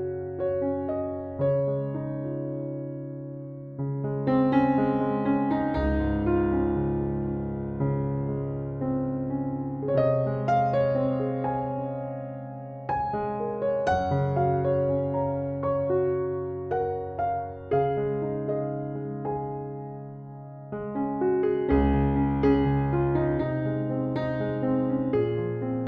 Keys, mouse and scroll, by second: 2.0 Escape, 6.9 ctrl+7, 10.9 ctrl+7, 17.8 1, 18.0 0, 18.2 5, 18.6 Return, 23.3 ctrl+7.